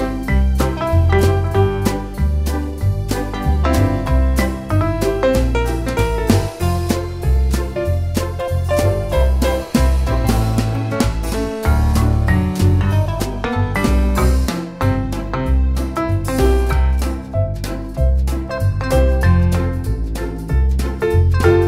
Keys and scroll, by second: 1.0-2.7 typing, 4.1 m, 4.1 space, 5.2 2, 5.4 Return.